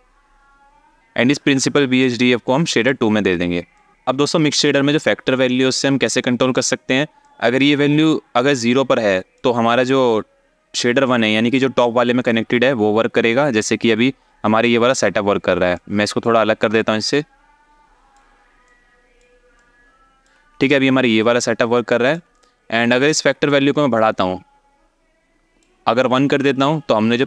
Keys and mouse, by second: 1.7 click, 1.9-2.6 drag, 3.4 ctrl+click, 6.0 alt+shift+middle click, 6.9-9.0 drag, 15.4 click, 16.4-17.8 ctrl+drag, 18.4-19.0 drag, 19.2 ctrl+click, 21.7 alt+shift+middle click, 22.0 click, 22.8-25.3 drag.